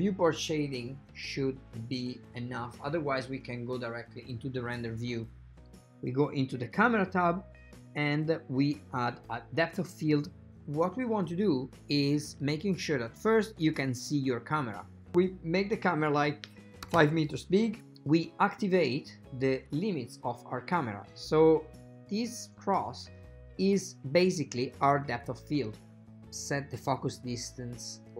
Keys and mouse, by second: 4.7 click, 9.3 click, 11.7 shift+middle click, 15.0 shift+middle click, 15.2-17.7 drag, 18.5 shift+middle click, 20.5 click, 26.0-28.1 drag.